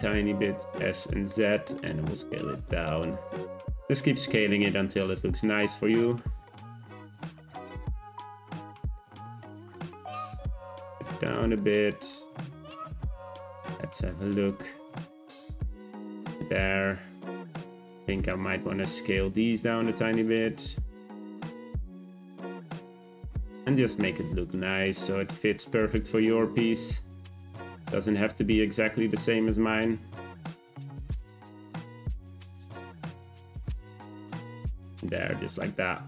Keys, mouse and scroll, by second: 1.3 middle click, 1.9 s, 2.9 Tab, 3.2 `, 4.2 g, 5.6-6.7 middle drag, 6.7-7.5 scroll up 3, 7.5 Tab, 7.7 a, 7.8 s, 9.0 Tab, 10.0 g, 11.6 middle click, 12.0 z, 13.4 `, 14.4 g, 15.5-17.6 middle drag, 17.6 click, 18.3 shift+click, 18.6 Tab, 18.9 a, 19.0 s, 20.4 s, 22.4 s, 23.4 Tab, 23.7 g, 25.0 click, 25.6 middle click, 26.1 click, 26.4 Tab, 26.7 g, 27.7-29.5 scroll up 2, 29.5 Tab, 29.9 g, 31.5 click, 31.8-32.6 middle drag, 32.6 click, 32.8-34.1 right drag, 34.1 click, 34.5-35.1 shift+middle drag, 35.1-35.6 scroll down 2, 35.6-36.0 middle drag.